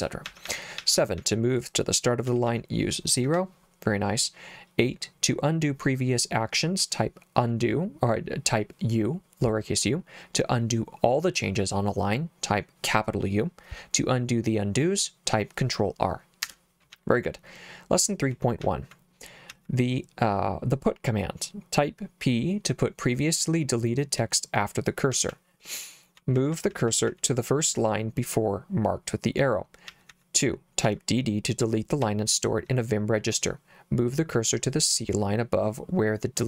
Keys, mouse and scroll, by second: 0.2 j, 0.4 j, 0.8 j, 1.2 j, 2.3 k, 2.4 k, 3.2 0, 16.9 j, 18.6 j, 19.5 j, 25.1 k, 25.3 k, 26.4-27.1 typing, 29.9 j, 30.1 j, 30.9 j, 32.0 j.